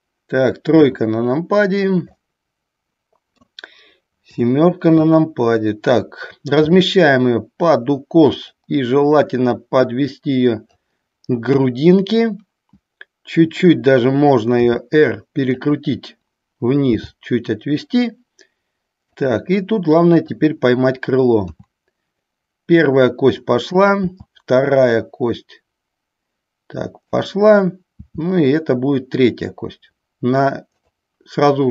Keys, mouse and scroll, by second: 0.0 click, 0.9 KP_3, 2.2-3.6 middle drag, 4.5 KP_7, 6.8 r, 8.6 click, 9.7-10.9 drag, 11.6 KP_1, 14.6 r, 15.6 click, 17.1 g, 19.3 click, 24.0 click, 24.1 e, 27.4 click, 31.0 click.